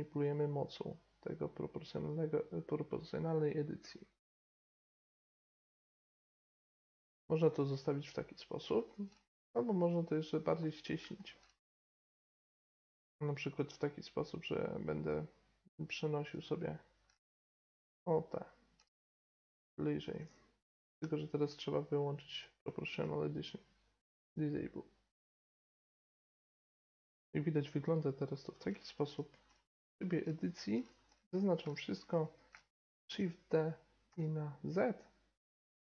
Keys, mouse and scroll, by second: 6.2-7.4 right drag, 6.3 middle click, 7.2-10.9 middle drag, 12.6-14.2 middle drag, 16.2-20.8 right drag, 19.8-21.8 middle drag, 20.6 o, 22.3-24.0 drag, 25.4 g, 25.7 right click, 25.7 g, 25.9 middle click, 26.1 right click, 26.2 g, 26.5 right click, 26.8 Tab, 27.0-27.5 middle drag, 29.4 Tab, 30.7 a, 31.0 a, 31.8 middle click, 33.0 shift+d.